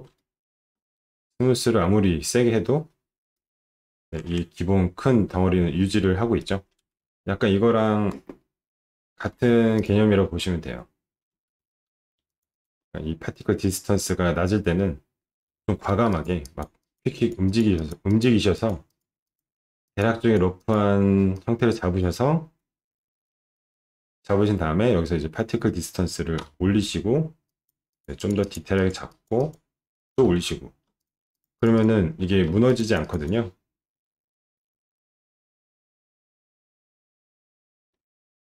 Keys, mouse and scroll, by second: 0.1 ctrl+d, 0.2 click, 1.0-3.2 shift+drag, 3.3 shift+click, 4.4 9, 9.7 click, 11.5 shift+d, 11.9 shift+d, 12.3 click, 12.5 alt+click, 15.3-17.0 typing, 16.1 click, 16.4 click, 16.8 click, 17.1 click, 17.5 click, 17.8 click, 18.1 click, 18.5 click, 18.9 click, 19.2 click, 19.8 click, 20.2 click, 20.6 click, 21.3 click, 26.4 d, 27.4 click, 27.9 click, 28.1 click, 28.4 click, 28.7 click, 29.1 click, 29.3 click, 31.0 shift+click, 31.3 shift+click, 31.6 shift+click, 31.7 shift+click, 32.2 d, 32.6 shift+click, 32.8 d, 32.8 shift+click, 33.0 shift+click, 33.2 shift+click, 36.7 click, 37.9 alt+middle click.